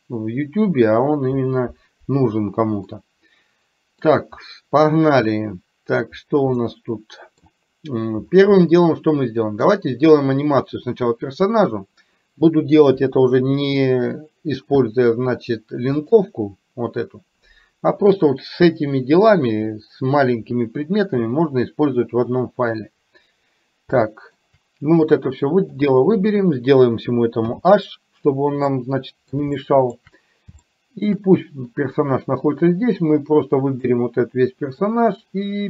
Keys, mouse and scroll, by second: 2.9-4.0 middle drag, 6.5-7.5 middle drag, 8.7-9.8 middle drag, 13.0 KP_3, 16.0-17.4 drag, 24.0 shift+middle click, 25.2 click, 27.5 h, 28.8 middle click, 29.7 middle click, 30.7 shift+middle click, 33.9-34.9 drag.